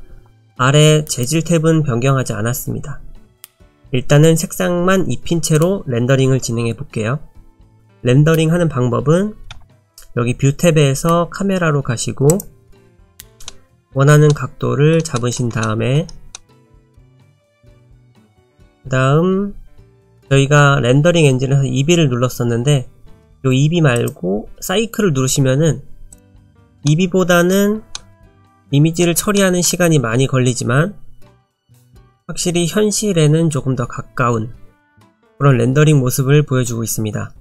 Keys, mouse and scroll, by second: 3.5 click, 13.5 middle click, 14.3 middle click, 15.1 shift+middle click, 15.6 shift+middle click, 16.3 shift+middle click, 20.0 click, 24.0 click, 26.9 middle click, 27.9 shift+middle click, 28.5 middle click, 29.3 shift+middle click.